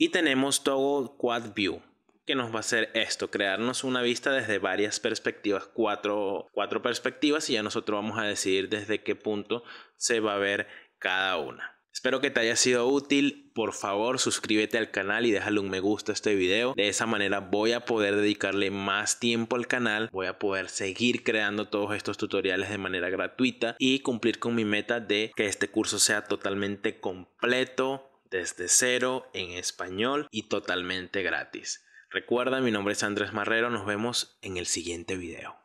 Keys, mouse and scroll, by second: 8.8 middle drag, 9.5 middle click.